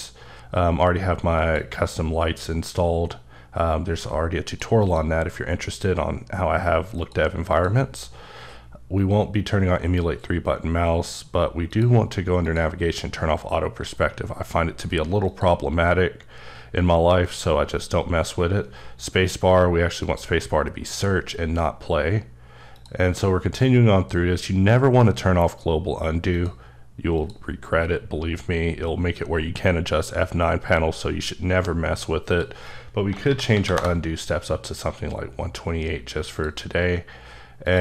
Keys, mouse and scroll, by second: 1.4 click, 3.5-4.4 scroll down 3, 4.4 click, 4.8 click, 7.0 click, 7.5 click, 11.7 click, 12.4 click, 15.3 click, 20.0 click, 22.7 click, 27.2 click, 28.0-29.2 scroll down 3, 32.3 click, 33.1 1, 33.2 KP_2, 33.5 KP_8, 33.7 KP_Enter, 37.7 click.